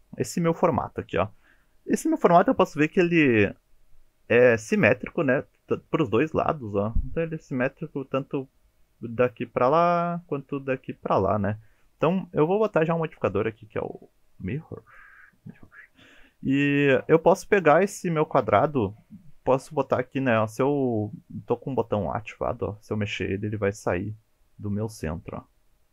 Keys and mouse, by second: 12.8-15.0 drag, 22.4 g.